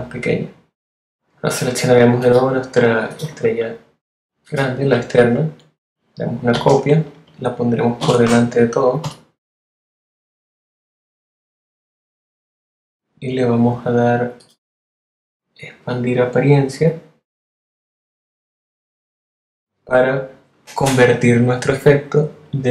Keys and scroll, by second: 3.2 a, 3.7 alt+a, 6.5 super+c, 7.2 shift+super+c, 7.9 shift+super+v, 9.0 shift+super+F7.